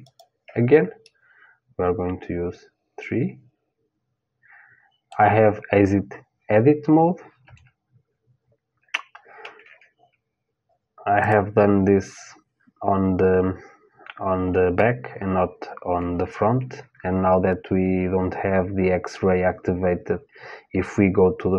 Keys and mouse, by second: 0.6 middle click, 1.4 click, 1.6-2.6 middle drag, 7.0 KP_1, 10.9-13.5 super+drag.